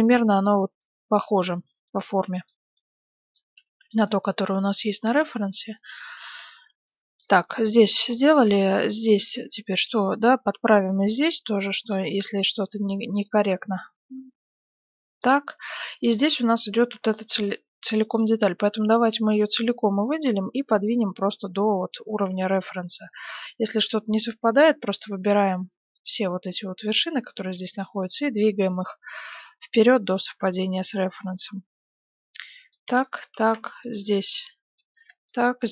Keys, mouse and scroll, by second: 0.1 b, 0.8-2.7 drag, 3.1 middle click, 3.6 a, 3.9 b, 4.7-5.8 drag, 6.2 a, 6.5-9.6 middle drag, 9.0 a, 9.2 b, 9.6-11.0 drag, 10.0 a, 10.3 b, 11.7 a, 11.8 b, 13.3 a, 13.4 b, 15.7-17.2 middle drag, 17.3 a, 17.8 b, 18.2 click, 20.0-21.0 drag, 22.1 a, 22.3 b, 24.0-25.5 drag, 25.1 a, 25.2 b, 26.5-28.5 drag, 27.5 a, 27.6 b, 28.8-30.2 drag, 30.2 a, 30.3 b, 32.7 click, 33.0-34.6 middle drag, 33.4 a, 33.5 b, 34.3 click, 34.9 a, 35.0 b.